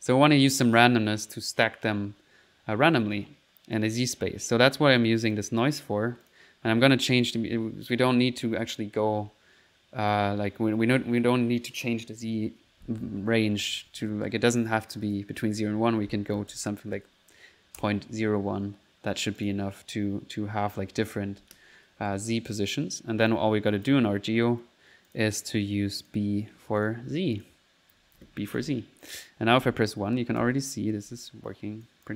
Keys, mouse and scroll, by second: 3.8 click, 5.3 click, 5.7 click, 6.3 click, 6.5 click, 7.2 click, 10.7-12.3 scroll up 1, 15.0 click, 19.4 click, 22.6 click, 23.3 click, 23.7 click, 25.1 click, 26.0 click, 26.8 click, 27.4 click, 28.6 1, 29.8-31.1 typing, 31.9 click.